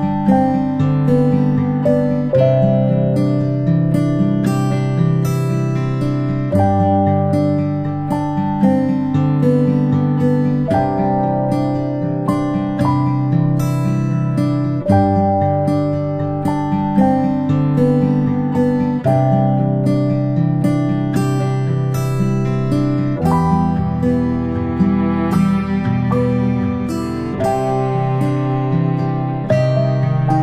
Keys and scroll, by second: 10.8-11.2 ctrl+space, 12.2 p, 23.4 ctrl+a.